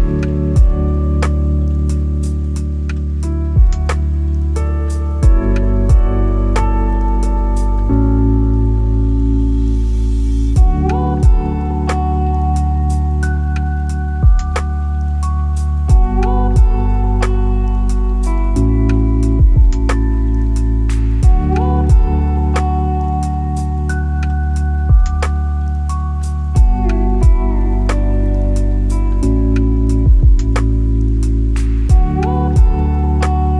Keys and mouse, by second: 0.0 click, 0.4 click, 0.6 click, 1.0 click, 2.0 click, 2.7 click, 4.1 middle click, 4.7 middle click, 5.7-6.2 drag, 7.6 click, 10.3 Tab, 11.6 click, 15.0 g, 15.4 z, 18.5 Tab, 19.7 click, 22.5 click, 23.1-25.0 drag, 26.7 Tab, 28.8 s, 30.0 alt+z, 30.8 s, 33.3 Tab.